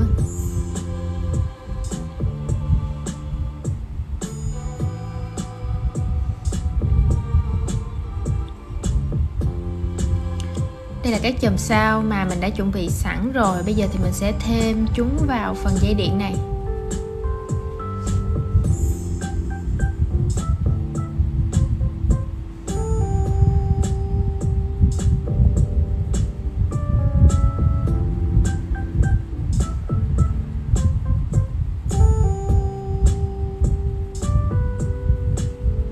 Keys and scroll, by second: 10.2 super+c, 12.3 super+v, 21.7 super+x, 23.2 super+v, 25.5 shift+super+g.